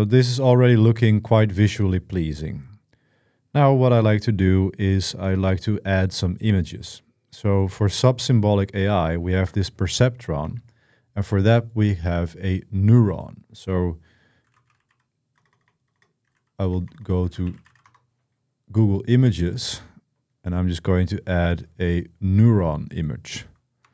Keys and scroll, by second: 10.2 super+1, 14.0-18.0 typing.